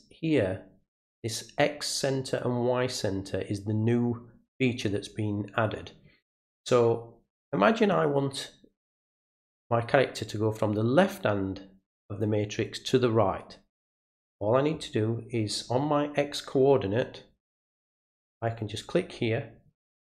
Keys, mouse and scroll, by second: 18.5 click.